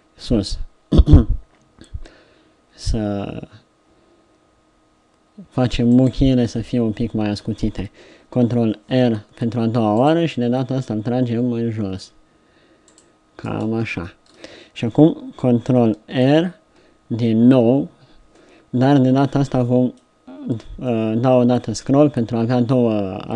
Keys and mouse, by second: 8.8 ctrl+r, 12.4-14.3 middle drag, 16.2 ctrl+r.